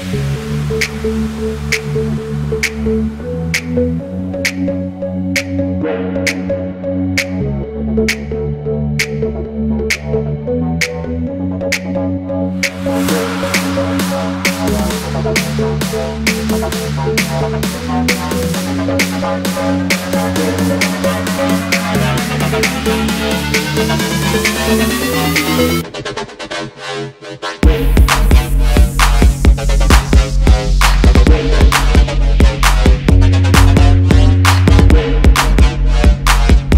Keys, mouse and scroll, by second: 1.0 ctrl+x, 4.1 double click, 5.2 alt+scroll down 1, 7.6 double click, 8.4 ctrl+f, 9.7 double click, 10.4 alt+scroll up 1, 10.7 space, 11.1 space, 13.6 alt+scroll up 1, 14.2 double click, 15.1 typing, 16.3-17.1 typing, 16.5 alt+scroll down 1, 16.9 double click, 19.7 shift+click, 20.6 alt+scroll up 1, 21.1 shift+click, 21.5-21.9 alt+scroll down 2, 23.1 ctrl+g, 23.7 alt+scroll down 1, 24.0 space, 24.8 double click, 25.5 ctrl+f, 26.1 space, 26.1 double click, 26.4 alt+scroll down 1, 26.7 alt+scroll up 1, 27.6 double click, 28.0 alt+scroll up 1, 28.8 double click, 29.1 alt+scroll up 1, 29.9 y, 30.5 alt+scroll down 1, 31.0 ctrl+x, 31.2 alt+scroll down 2, 31.5 v, 31.7 double click, 32.1 alt+scroll up 1, 33.0 double click, 34.5 ctrl+f, 35.9 double click, 36.1 alt+scroll down 1, 36.6 space.